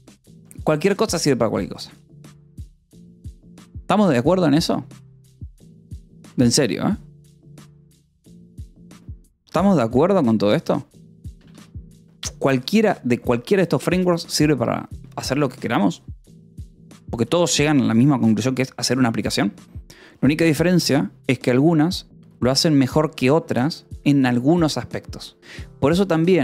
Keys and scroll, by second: 2.2 ctrl+s, 11.8 g, 13.0 j, 15.7 ctrl+d, 18.1 ctrl+u.